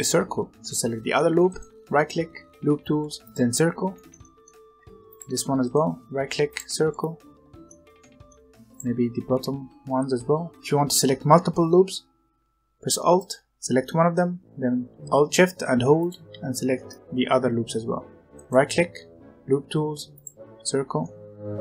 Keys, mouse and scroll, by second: 0.0 middle click, 0.5 alt+click, 1.4-3.9 right drag, 3.9-5.0 shift+middle drag, 5.0 alt+click, 6.9-8.6 middle drag, 8.6 alt+click, 13.1 alt+click, 15.9 alt+shift+click, 16.8 alt+shift+click, 16.9-18.3 middle drag, 18.3-20.9 right drag, 20.9 scroll down 1, 20.9 middle click.